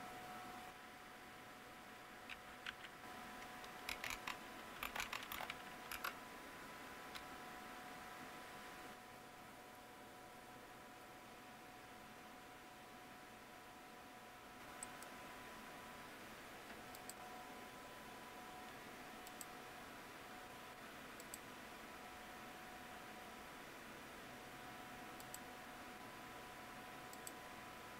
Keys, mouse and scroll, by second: 3.6-6.0 typing, 5.8 Return, 14.8 click.